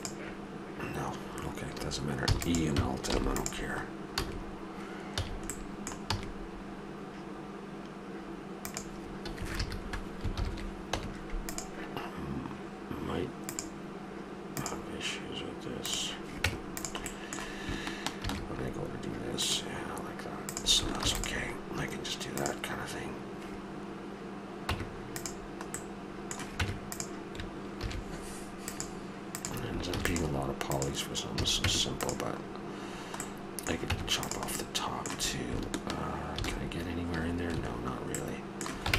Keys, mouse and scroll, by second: 2.3 e, 3.1 alt+m, 4.2 a, 5.2 a, 5.7 click, 6.1 e, 9.4 a, 9.6 a, 10.3 ctrl+n, 11.0 Tab, 13.4-15.2 drag, 15.2 middle drag, 15.8 click, 16.4 Tab, 19.3 ctrl+r, 21.0 ctrl+r, 24.7 Tab, 26.5 Tab, 27.7 ctrl+r, 29.9 ctrl+r, 31.4 a, 31.6 Tab, 33.9 Tab, 36.4 ctrl+r.